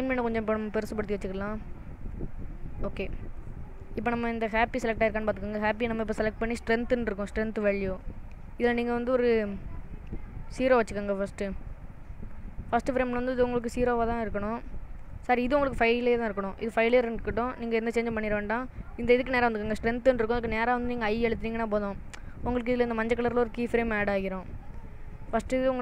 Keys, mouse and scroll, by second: 1.1 click, 4.6 click, 5.3 click, 9.2 click, 21.2 i.